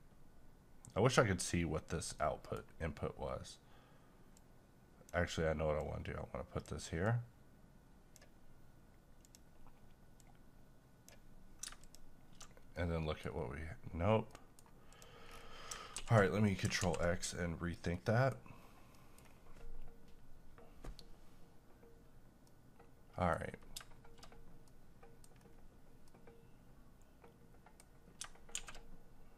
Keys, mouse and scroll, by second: 2.1 middle click, 2.7 scroll up 1, 4.3-11.8 drag, 12.8 middle click, 13.3-14.1 scroll up 1, 14.3 middle click, 14.9 click, 15.3 scroll down 1, 16.0 x, 16.5 click, 16.8 ctrl+x, 18.0 middle click, 18.6-18.9 scroll up 1, 19.0 middle click, 19.2 scroll down 1, 22.5 middle click, 23.4-23.7 scroll up 1, 24.7 middle click, 25.4-26.2 scroll down 1, 26.2-28.5 middle drag, 28.5 shift+a.